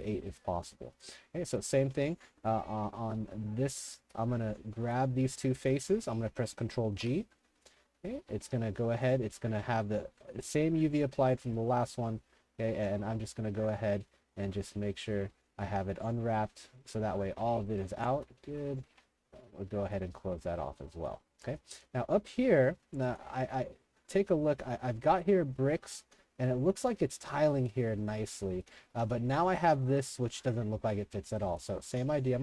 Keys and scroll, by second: 0.0-0.5 typing, 2.4-6.4 typing, 7.0 ctrl+g, 12.5 3, 17.7-19.0 typing, 20.4 3, 22.0 w, 22.3 w, 22.6 w, 23.5 5, 24.3 Escape, 25.9-27.3 typing, 28.4-29.5 typing, 31.2 3, 31.9 s.